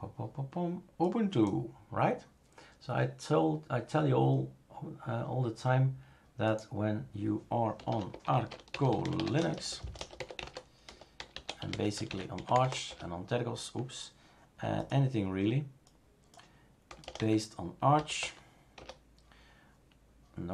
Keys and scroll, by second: 7.5-13.1 typing, 16.9-18.2 typing, 18.8 Return.